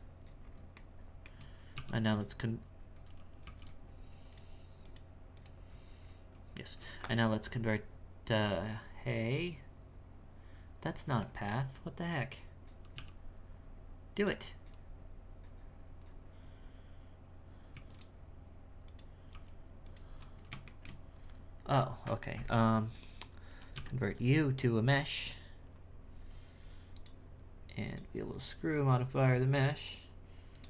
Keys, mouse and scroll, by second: 0.1-0.7 scroll up 4, 0.7 shift+middle click, 1.4-1.7 scroll down 3, 1.7 w, 3.4 g, 4.8 right click, 5.3 right click, 5.7-6.5 scroll up 7, 6.5 scroll down 7, 6.7 w, 9.3 click, 10.6-12.9 scroll down 3, 12.9 w, 17.7 x, 18.8 right click, 19.3 g, 20.7-23.1 shift+middle drag, 23.1-23.7 scroll down 1, 23.7 w, 26.9 click, 27.8-30.6 drag.